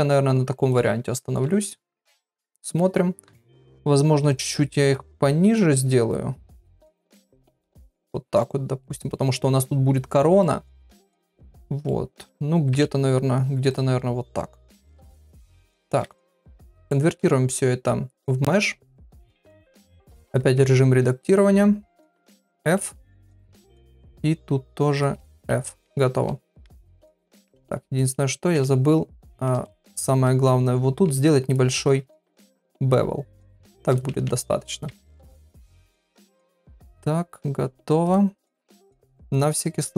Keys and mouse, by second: 1.4 Tab, 1.8 click, 2.1 middle click, 3.2 KP_1, 4.9 click, 6.1 click, 7.5 click, 8.8 middle click, 10.4-11.5 middle drag, 11.8 middle click, 12.7 KP_1, 13.7 click, 15.0 right click, 16.9-18.2 right drag, 19.0 KP_Divide, 19.5 Tab, 19.8 middle click, 20.1 2, 22.4 f, 23.1 click, 23.4 shift+middle click, 25.8 Tab, 26.6 KP_Divide, 27.5 Tab, 27.9 shift+middle click, 28.5 KP_Divide, 29.2 shift+middle click, 30.2 middle click, 32.2 ctrl+b, 34.1 Tab, 34.8 KP_Divide, 35.7 Tab, 36.2 Tab, 36.6-38.1 right drag.